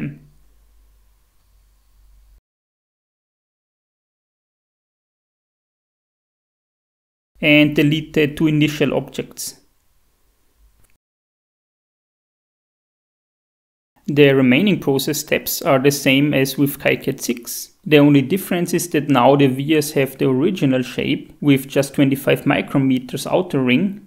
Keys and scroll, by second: 10.4 ctrl+a, 12.7 Delete.